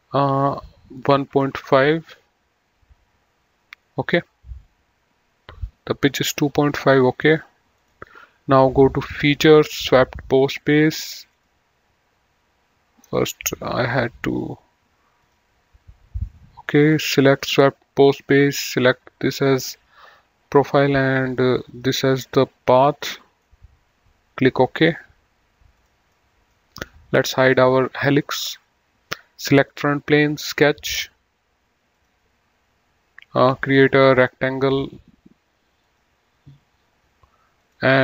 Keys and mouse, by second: 1.5 KP_1, 1.6 KP_Decimal, 1.9 KP_5, 2.1 KP_Enter, 7.9 click, 10.0 click, 11.5 click, 13.5 click, 15.5 click, 17.6 click, 21.0 click, 21.6 middle click, 23.4 middle click, 25.0 click, 26.4 middle click, 27.7 click, 29.9 click, 32.2 click, 33.7 click, 35.8 click, 37.8 click.